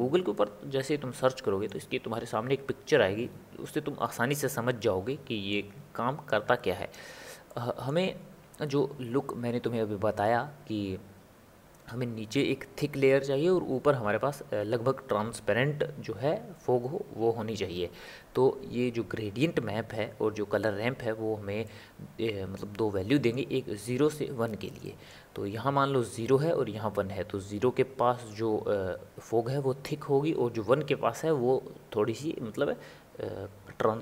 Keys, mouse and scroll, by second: 0.3-3.4 middle drag, 4.8-6.3 middle drag, 6.3 click, 7.5-34.0 middle drag.